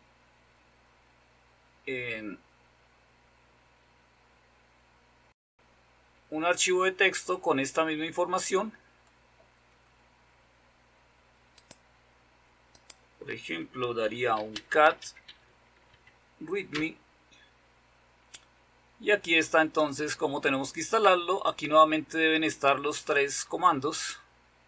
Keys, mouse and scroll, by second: 0.9-2.3 scroll down 2, 2.3-2.9 scroll down 1, 2.9-3.6 scroll down 1, 3.6-4.1 scroll down 1, 4.9-5.6 scroll down 2, 5.6-6.4 scroll down 1, 6.4-7.2 scroll down 1, 7.2-9.9 scroll down 1, 11.8-13.8 drag, 13.8 typing, 15.2-15.5 typing, 16.2 Tab, 16.7 typing, 16.9 Return, 18.7-19.6 scroll up 1, 19.6-21.1 scroll up 1, 21.1-23.2 scroll up 1, 23.2-24.3 scroll up 1.